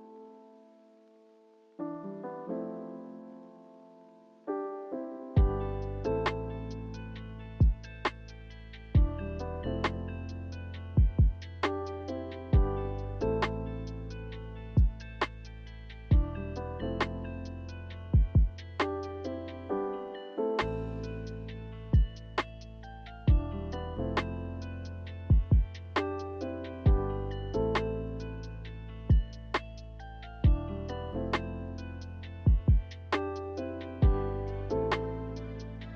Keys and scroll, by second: 13.0 z, 16.6 b, 18.4-19.3 typing, 22.4 a, 30.3 q.